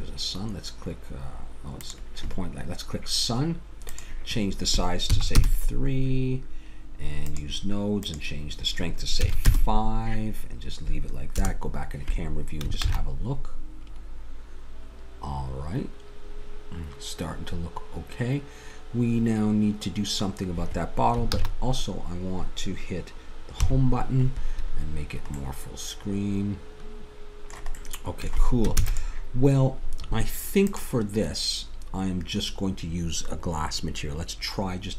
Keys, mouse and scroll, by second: 7.2-9.9 drag, 11.4 KP_0, 12.9 shift+z, 21.4 shift+z, 23.6 Home, 27.8-30.1 drag, 28.8 ctrl+s, 30.7-32.6 drag.